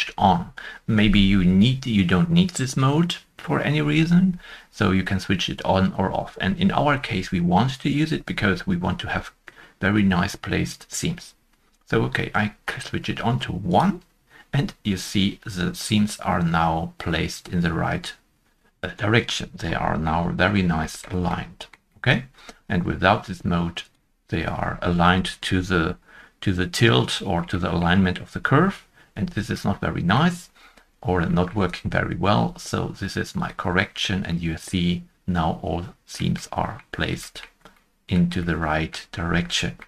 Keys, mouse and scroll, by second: 7.6 scroll up 1, 8.0 scroll down 1, 9.0-11.7 scroll up 2, 19.5 scroll down 1, 19.6-20.1 scroll down 2, 20.1 shift+middle click, 21.8 middle click, 27.5 shift+middle click, 29.5 shift+middle click, 31.2 middle click, 31.3 shift+middle click, 34.3 middle click, 36.3 shift+middle click, 38.5 shift+middle click, 38.6 middle click, 39.1-39.4 scroll up 1.